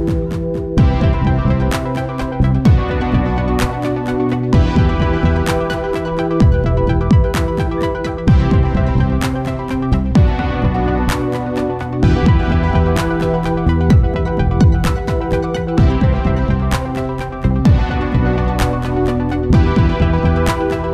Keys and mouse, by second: 1.3 KP_7, 3.6-5.4 drag, 6.8-8.7 drag, 8.8-11.3 right drag, 9.7-11.6 drag, 11.8-13.6 drag, 12.6 ctrl+s, 13.2 z, 14.8 KP_0, 16.8 shift+f, 20.1 ctrl+s.